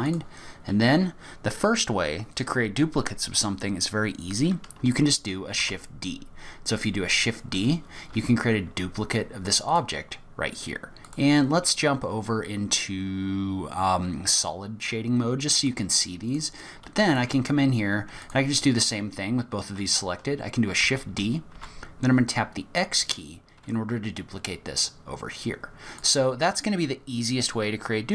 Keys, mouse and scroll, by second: 0.1 click, 5.6 shift+d, 11.1 click, 15.7 click, 17.1 shift+click, 18.2 click, 20.8 shift+d.